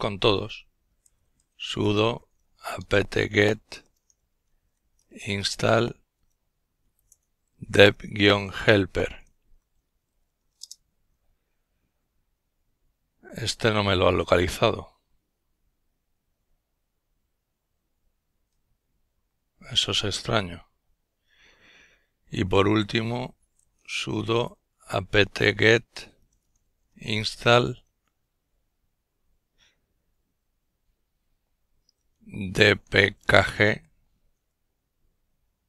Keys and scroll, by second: 0.3 alt+space, 0.5 alt+a, 0.6 alt+p, 0.8 alt+t, 1.5-5.7 typing, 5.9 alt+b, 6.9 alt+h, 7.6 alt+e, 7.8 alt+l, 8.2 alt+p, 8.4 alt+e, 8.7 alt+r, 9.2 alt+Return, 11.6 typing, 21.8 alt+s, 22.0 alt+u, 22.4 alt+d, 22.4 alt+o, 22.7 alt+space, 22.7 alt+a, 22.9 alt+p, 23.1 alt+t, 23.7-26.8 typing, 26.2 alt+l, 30.7 alt+d, 31.1 alt+p, 31.6 alt+k, 32.1 alt+g, 35.3 alt+-.